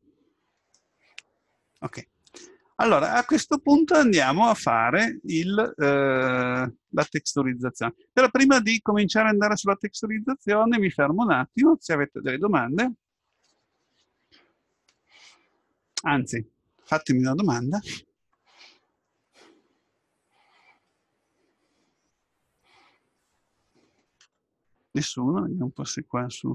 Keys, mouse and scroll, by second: 0.1-2.6 middle drag, 4.1-6.0 middle drag.